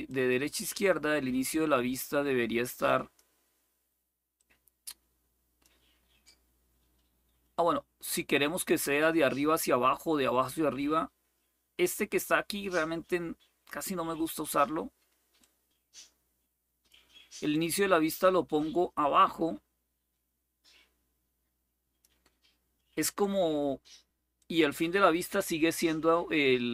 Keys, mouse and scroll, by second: 4.1-5.4 drag, 6.0-12.5 drag, 15.1-16.7 drag, 17.3-21.8 drag, 24.1 click.